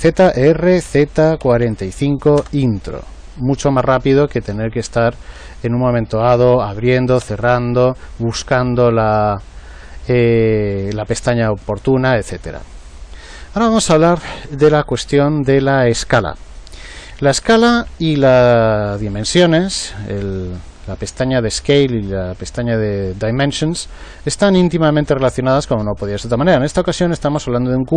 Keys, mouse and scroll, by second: 0.3 r, 3.7 ctrl+z, 6.7 n, 7.1 n.